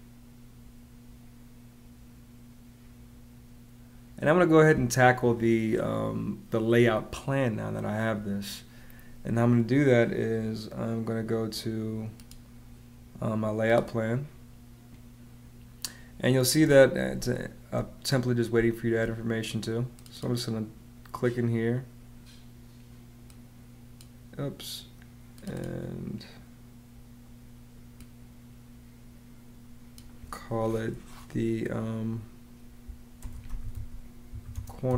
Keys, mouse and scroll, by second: 17.0 space, 18.4 space, 32.8-34.9 typing.